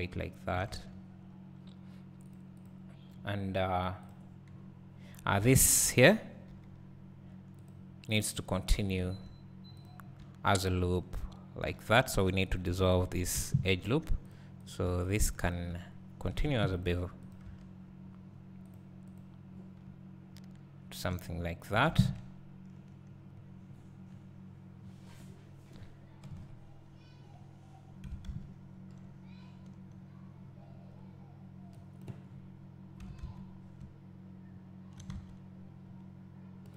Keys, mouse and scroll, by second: 0.2 `, 0.9 Tab, 1.2-2.3 scroll up 1, 2.6 click, 4.1 click, 5.5 alt+a, 6.5 k, 9.1 1, 9.9 click, 11.0 shift+click, 11.7 j, 12.1 2, 12.6 click, 13.4 ctrl+x, 14.3 click, 15.1 shift+click, 16.9 ctrl+e, 17.4 click, 17.5 Tab, 18.7 click, 21.4-22.2 scroll down 2, 22.2 `, 24.1-24.5 scroll down 2, 24.9 scroll up 2, 26.4 KP_3, 26.5 KP_3, 27.4 scroll up 1, 30.3 scroll down 1, 31.8 click, 32.3 scroll up 1, 33.8 `, 35.4 Tab, 35.4-36.7 drag.